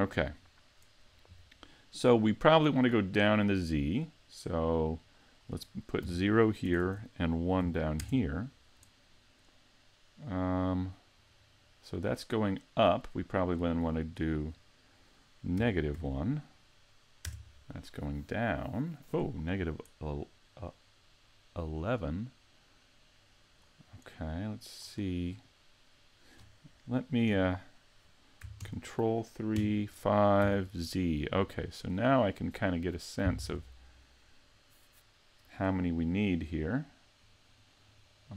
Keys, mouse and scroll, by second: 4.9 click, 6.8 Tab, 10.3 Tab, 10.7 click, 11.0 click, 11.3 click, 11.5 click, 13.0 click, 20.6 click, 25.6 middle click, 27.3 KP_3, 28.6 ctrl+KP_3, 29.6 KP_5, 30.4 z, 31.0-31.5 scroll down 3, 31.7 shift+middle click, 32.2-32.7 scroll up 1, 37.2 click, 37.4 click, 37.7 click, 37.8 click, 38.0 click, 38.2 click.